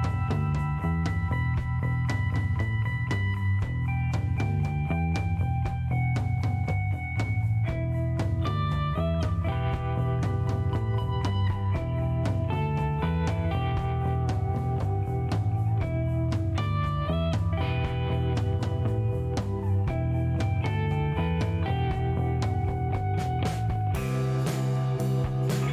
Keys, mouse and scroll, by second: 1.0 scroll up 1, 1.6 scroll down 2, 2.1 middle click, 4.3 click, 6.0 click, 8.0-8.8 typing, 10.4 click, 12.1 click, 13.6 click, 15.8 8, 16.0 Return, 17.5 click, 19.3 click, 20.5 click, 22.7 click, 24.1-25.7 drag.